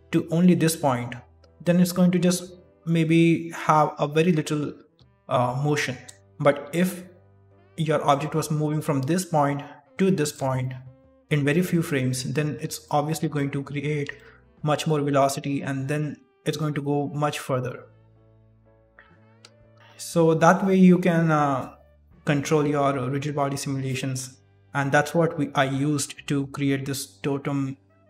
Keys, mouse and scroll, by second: 0.0-2.6 typing, 0.0 click, 1.1 click, 2.6 click, 4.8 d, 4.9 d, 7.6 d, 8.0 click, 8.6-10.2 typing, 9.8 click, 10.5 shift+middle click, 11.6 d, 11.9 click, 12.4 d, 12.8 shift+middle click, 13.6-14.1 scroll down 2, 14.1 shift+middle click, 15.0 d, 15.5 click, 15.5 d, 15.9 d, 16.1 d, 17.2 d, 17.3 click, 17.7-18.3 d, 18.3 click, 18.6 d, 18.8 d, 19.3-19.7 ctrl+z, 19.7 shift+middle click, 19.7 scroll up 1.